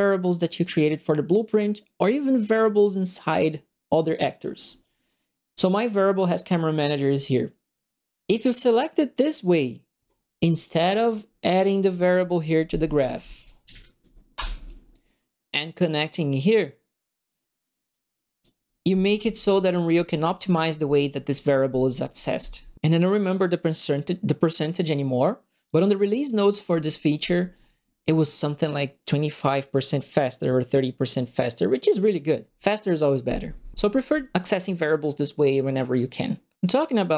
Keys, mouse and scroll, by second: 0.1-0.5 scroll down 1, 10.6 click, 11.8 right click, 12.8-14.2 typing, 14.3 Return, 15.8-17.8 drag, 18.1 click, 19.1 Delete.